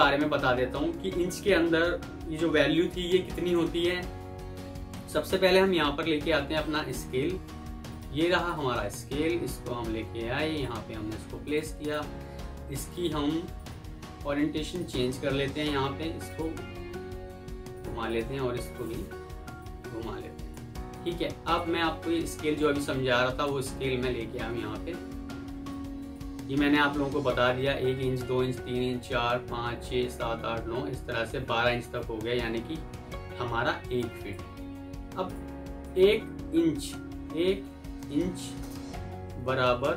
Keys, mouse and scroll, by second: 11.7 double click, 18.0 double click, 24.3 typing, 25.2 F2, 26.7 Escape, 33.4 F2, 37.6 typing, 39.2 typing.